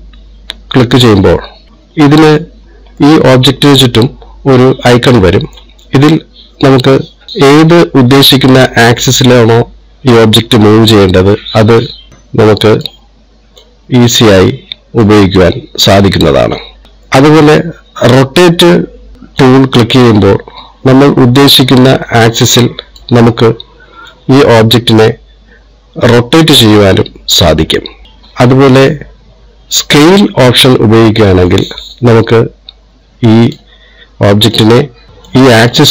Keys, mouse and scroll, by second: 1.5 click, 3.5 middle click, 11.9 click, 14.1 click, 16.4 click, 19.8 click, 21.7 click, 24.6 click, 26.6 click, 30.3 click, 32.0 click, 35.8 click.